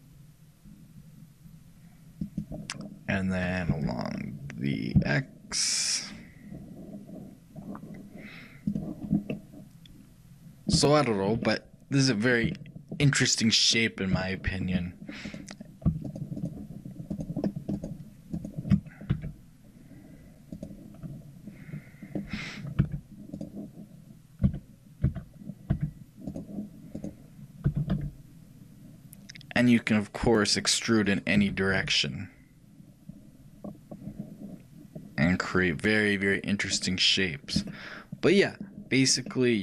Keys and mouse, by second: 9.1-16.1 middle drag, 16.1-22.4 shift+drag, 19.2 e, 24.5 a, 25.1 a, 25.8 e, 28.3 click, 31.2-37.8 right drag, 37.8-39.6 middle drag.